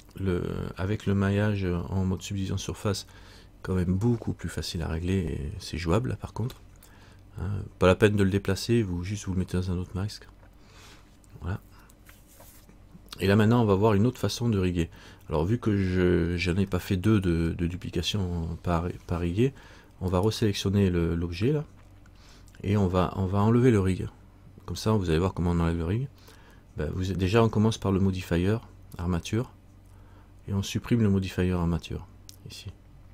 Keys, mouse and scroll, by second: 15.1-16.8 scroll up 2, 16.8 scroll up 1, 17.0 shift+middle click, 20.3 right click.